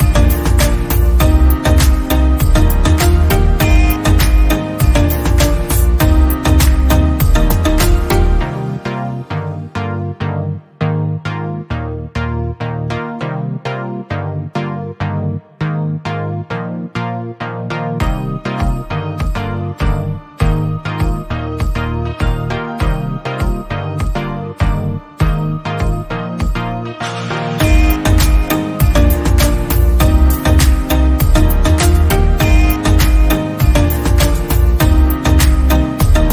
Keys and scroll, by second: 0.3 Right, 1.0 Right, 1.0 Down, 1.6 Right, 2.1 Right, 2.1 Down, 2.6 Left, 2.9 Right, 9.2 ctrl+c, 9.4 ctrl+v, 13.0 ctrl+a, 13.4-18.7 typing.